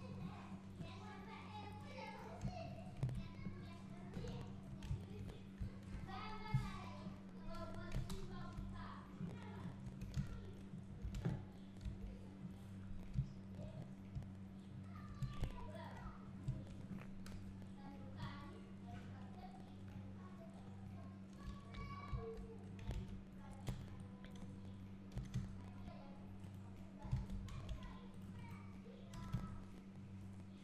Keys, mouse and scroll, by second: 0.0 x, 0.2 scroll down 1, 1.8 click, 3.0 KP_Decimal, 3.6 scroll down 1, 4.5 2, 5.2 alt+click, 6.6 KP_1, 8.2 ctrl+KP_1, 9.2 scroll down 1, 9.9 1, 10.8 scroll up 1, 11.2 alt+a, 11.6-12.0 scroll up 1, 12.4 scroll down 1, 13.2 `, 13.7 scroll up 1, 14.2 `, 15.9 alt+click, 16.8-17.4 scroll down 1, 17.4 KP_7, 18.2 scroll up 1, 20.8 scroll down 1, 23.0 alt+a, 24.3 b, 25.2 g, 26.6 right click, 27.2 alt+a, 28.2 c, 29.2 g.